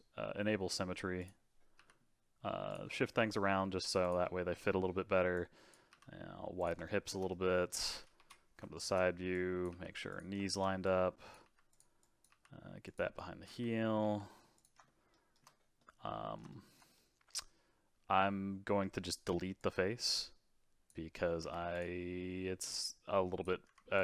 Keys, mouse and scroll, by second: 1.2 click, 1.8 g, 2.9 middle click, 3.4 g, 4.2 middle click, 5.0-5.3 scroll down 1, 5.3 click, 5.9 g, 6.8-8.2 shift+middle drag, 8.2 KP_3, 8.7 shift+middle click, 9.3 click, 9.7 g, 10.4 shift+middle click, 10.8 click, 11.4 g, 12.0 click, 12.3 g, 13.1 click, 14.0 g, 14.8-19.6 shift+middle drag, 19.6 click, 21.4 x, 22.0 middle click, 22.7 click, 23.6 x.